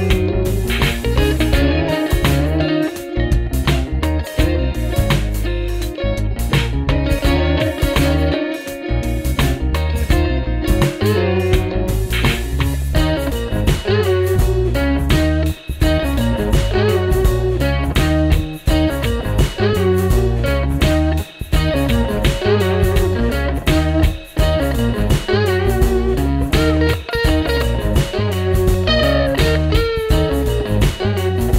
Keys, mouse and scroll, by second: 0.0 shift+Up, 0.5 shift+Up, 1.3 shift+Down, 1.7 shift+Down, 2.4 shift+Down, 2.9 shift+Down, 4.0 shift+Up, 4.2 shift+Up, 4.5 shift+Up, 5.0 shift+Up, 12.3 shift+click, 12.9 shift+Up, 13.4 shift+Up, 13.9 shift+Up, 14.4 shift+Up, 14.7 shift+Up, 16.1 shift+Up, 16.5 shift+Up.